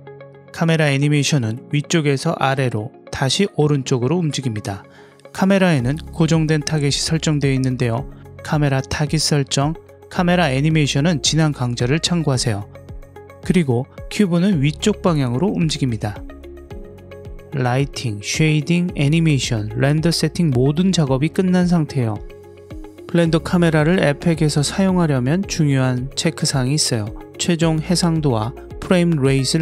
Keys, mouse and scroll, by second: 6.0 click, 13.1 click, 17.3 click, 17.9 click, 18.8 click, 19.5 click, 23.7 ctrl+alt+q.